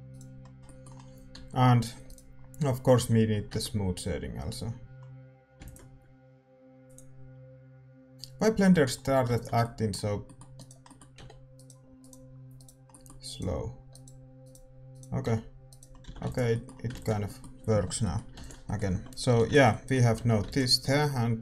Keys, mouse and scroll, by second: 0.1-2.5 right drag, 2.5 Tab, 2.8-4.6 right drag, 3.3-8.0 middle drag, 4.6 Tab, 8.0 ctrl+s, 8.0 click, 8.6-10.5 middle drag, 9.5 ctrl+s, 10.5-18.9 right drag, 11.1 g, 14.4 middle click, 15.2 g, 15.8-21.4 middle drag, 16.0 a, 16.4 ctrl+s, 18.9 a, 19.0-21.4 drag, 19.6 ctrl+s, 20.1 a, 20.7 ctrl+s.